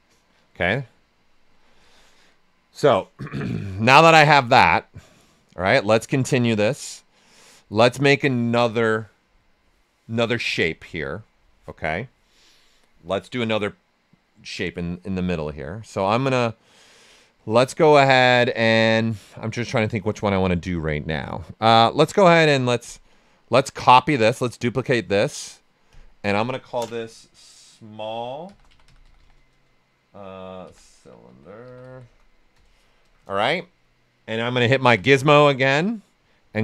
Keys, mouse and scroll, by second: 4.5-21.8 drag, 23.0-24.6 drag, 28.2-32.5 typing, 34.9 w, 35.8 right click, 36.3 ctrl+right click.